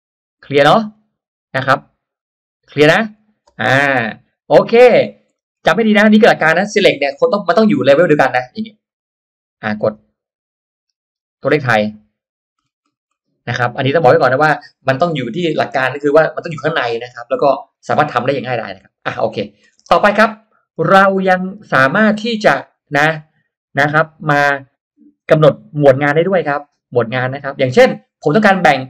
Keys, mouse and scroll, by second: 0.3 scroll down 2, 0.7 middle click, 2.6 middle click, 3.1 scroll down 1, 3.4 space, 3.6-4.0 drag, 4.0 middle click, 4.2-5.2 scroll up 3, 5.2 middle click, 5.8 scroll up 1, 7.8-8.6 scroll up 2, 8.8 click, 11.8 click, 12.5 scroll down 1, 12.9 scroll up 1, 19.3 click, 19.6-19.9 scroll down 1, 20.0-20.9 scroll up 2, 20.2 middle click.